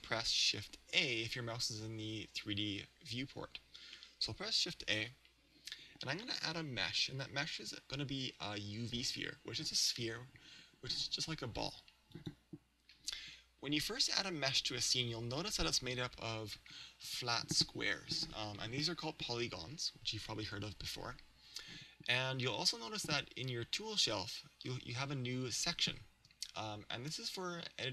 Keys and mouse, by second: 4.9 shift+a, 14.2-16.2 middle drag.